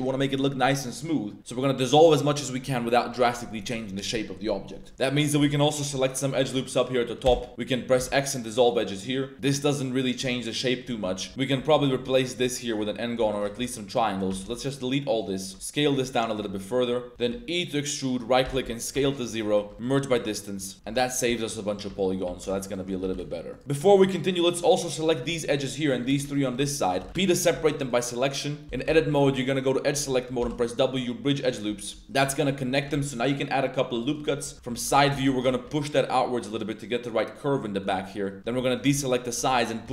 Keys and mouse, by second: 1.4 2, 2.0 middle drag, 2.6 Tab, 3.1 middle drag, 4.6 middle click, 4.9 2, 5.2 alt+click, 5.7 alt+shift+click, 6.2 alt+shift+click, 6.5 middle drag, 7.2 x, 7.9 x, 8.9 click, 10.6 click, 11.0 Tab, 11.3 click, 11.3 Tab, 11.6 3, 12.1 alt+click, 13.3 shift+click, 14.0 ctrl+shift+click, 14.4 x, 15.5 s, 15.9 click, 16.5 click, 17.1 e, 18.1 click, 18.4 s, 18.9 0, 19.0 click, 19.2 middle click, 19.7 m, 20.1 Tab, 20.2-20.7 middle drag, 20.7 click, 20.7 z, 21.1 Tab, 21.3-21.8 drag, 22.1 Tab, 22.2 2, 22.6 alt+click, 23.0 g, 23.1 g, 23.5 click, 24.0 ctrl+2, 24.4 ctrl+click, 24.6 middle drag, 25.1 shift+middle click, 25.9 shift+click, 26.4 ctrl+drag, 26.6 middle click, 27.1 p, 27.5 Tab, 27.8 click, 28.2 click, 28.6 1, 28.8 a, 29.1 2, 30.4 w, 31.9 2, 32.4 shift+click, 32.7 click, 32.9 ctrl+r, 34.1 click, 34.5 KP_1, 34.7 z, 35.1 shift+1, 35.3 shift+click, 35.6 g, 37.8 click, 38.0 click, 38.4 z, 38.6 alt+shift+click, 39.4 click, 39.8 g.